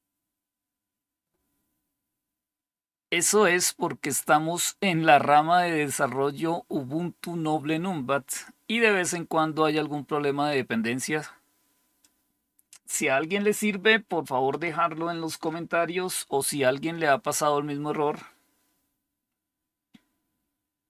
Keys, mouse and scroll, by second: 1.6 typing, 11.9 click, 20.8 click.